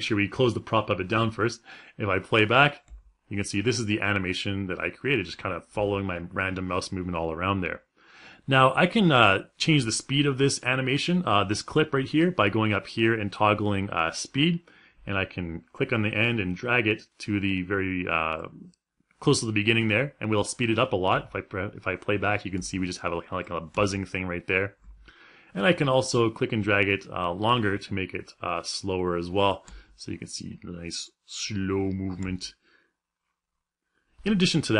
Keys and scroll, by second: 1.8 space, 2.4 space, 20.7 space, 29.2 space.